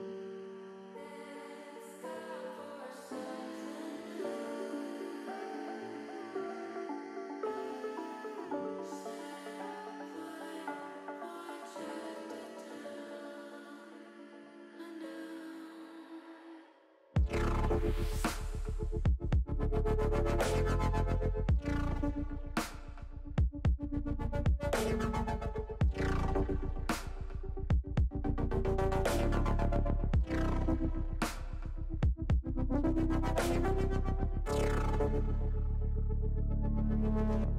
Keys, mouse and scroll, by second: 1.0 alt+shift+click, 1.8 shift+middle click, 4.1 alt+shift+click, 5.0 alt+shift+click, 6.1 ctrl+z, 6.5 ctrl+z, 7.0 click, 7.4 middle click, 9.4 shift+click, 10.2 shift+click, 11.7 middle click, 12.3 shift+middle click, 13.2 shift+middle click, 14.0 shift+middle click, 14.9 shift+click, 15.5 middle click, 16.0 shift+middle click, 16.8 shift+middle click, 17.9 shift+click, 19.2 shift+click, 22.0 ctrl+z, 22.5 shift+click, 23.0 middle click, 24.8 click, 25.2 shift+click, 25.9 shift+click, 26.3 shift+click, 26.7 shift+click, 27.6 shift+click, 28.2 middle click, 31.0 click, 32.2 ctrl+z.